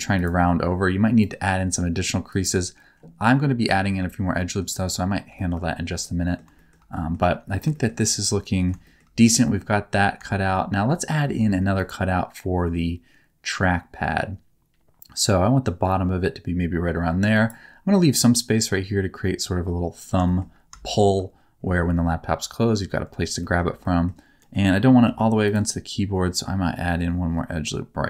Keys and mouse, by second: 0.1 click, 1.3-2.3 drag, 3.7 shift+middle click, 4.3 middle click, 5.3 shift+middle click, 6.0 middle click, 6.5 shift+middle click, 6.9 middle click, 7.7 shift+middle click, 8.0 middle click, 8.8 shift+middle click, 9.4 middle click, 10.4 shift+middle click, 11.3 ctrl+r, 17.3-18.4 drag, 20.2 shift+middle click, 20.8 shift+middle click, 23.4 shift+middle click, 23.8 middle click, 24.3 middle click, 25.0 ctrl+r.